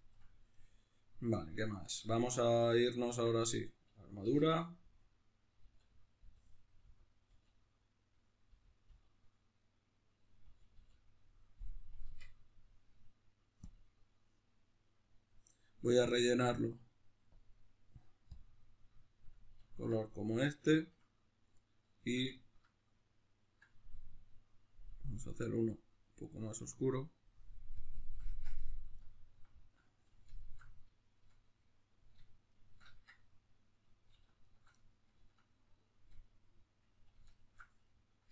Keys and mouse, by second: 0.5-3.2 right drag, 3.2 Tab, 4.2 l, 9.8-17.3 middle drag, 10.4 l, 12.2 Tab, 17.3 click, 18.4 click, 18.6-25.7 middle drag, 25.7-28.9 drag, 28.4 Tab, 28.9-30.9 alt+right drag, 30.9-32.5 shift+middle drag, 32.5 alt+shift+right click, 33.2-34.4 middle drag, 34.4 alt+shift+right click, 34.7-37.3 middle drag, 37.3 alt+shift+right click, 37.9-38.3 middle drag.